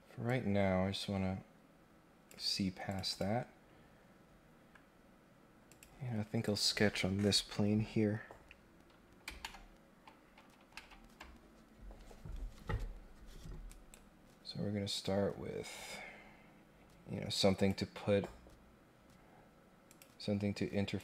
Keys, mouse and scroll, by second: 0.2-2.3 drag, 2.9 click, 3.1 click, 5.6 click, 6.4 click, 13.6 right click, 14.9-17.6 drag, 19.9 click, 20.9-21.0 drag.